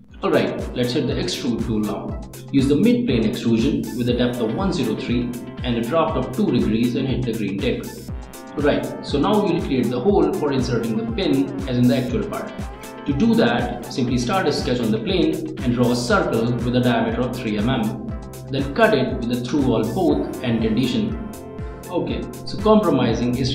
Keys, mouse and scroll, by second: 0.7 click, 1.7 middle click, 4.0 middle click, 7.7 click, 9.6 click, 10.2 click, 10.5 right click, 11.4 scroll down 1, 11.6 click, 12.1 click, 13.1 click, 14.0 click, 14.7 click, 15.4 right click, 16.0 scroll down 1, 16.2 click, 16.8 right click, 17.2 click, 18.4 3, 19.2 click, 20.0 click, 21.3 click, 22.5-23.5 middle drag.